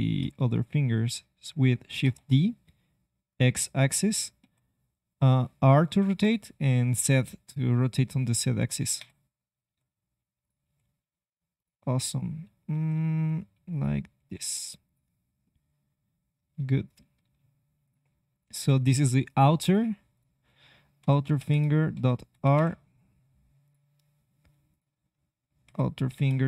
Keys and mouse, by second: 0.5-1.9 drag, 1.9 shift+d, 4.4 r, 9.7 r, 10.6 g, 12.7 r, 14.1 g, 15.4 click, 15.6 middle click, 17.1 r.